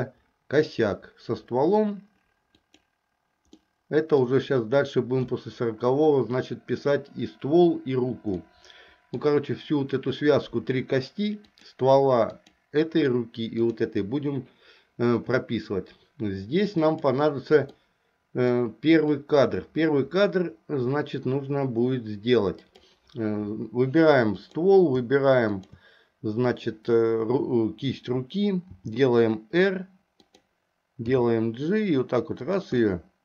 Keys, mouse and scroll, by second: 2.7 click, 3.7 middle click, 8.4 middle click, 11.5 click, 12.4 click, 17.0 click, 17.9 middle click, 19.3-23.0 drag, 24.5 click, 25.5 shift+click, 28.8 r, 31.3 g, 33.0-33.2 middle drag.